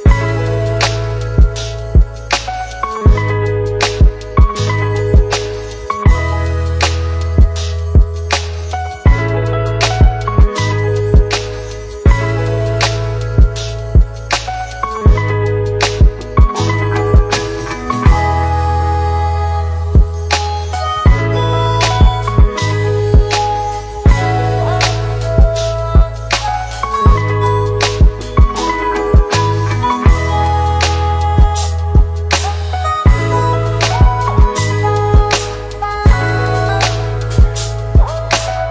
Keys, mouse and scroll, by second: 4.0 click, 8.9 click, 18.0 click, 20.8 click, 25.7 c, 26.4 click, 30.2 ctrl+v, 31.4-33.4 drag.